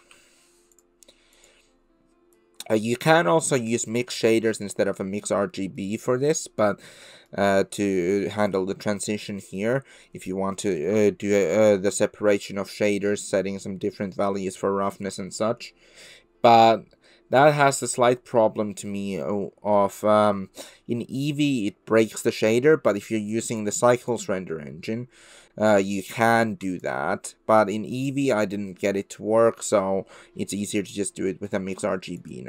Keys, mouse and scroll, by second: 5.6 click, 6.3 drag, 6.5-7.3 middle drag, 7.7 middle click, 8.5 click, 9.4 middle click, 10.6-10.9 shift+middle drag, 21.6 click, 21.7 middle drag, 21.8 click, 21.8 middle drag, 22.0 click, 23.6-24.6 drag, 26.2-27.2 drag, 27.9 click, 28.8 middle click, 31.5-32.3 drag.